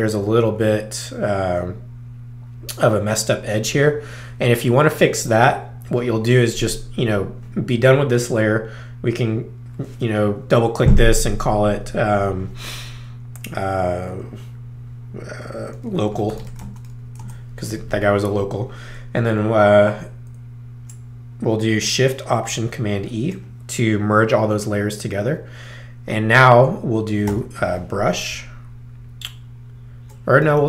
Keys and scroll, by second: 15.9-17.1 typing, 17.2 Return, 22.9 alt+shift+super+e, 27.3 b, 28.3 ctrl+alt+b, 30.4 ctrl+alt+s.